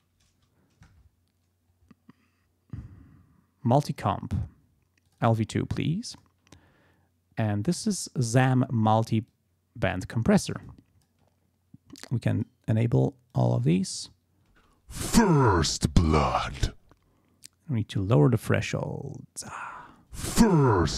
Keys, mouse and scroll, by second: 1.8-3.2 scroll down 6, 5.1 click, 6.1 click, 9.3 click, 10.6 click, 12.3 click, 12.8 click, 13.3 click, 14.5 space, 16.8 space, 18.3-19.7 drag, 19.7 space, 20.7 click.